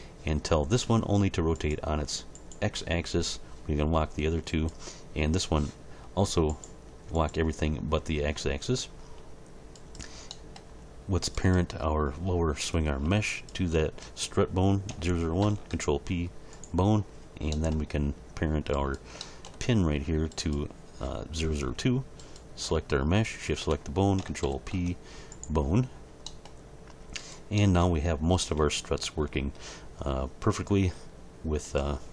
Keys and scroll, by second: 15.4 ctrl+p, 24.4 ctrl+p, 28.4 g.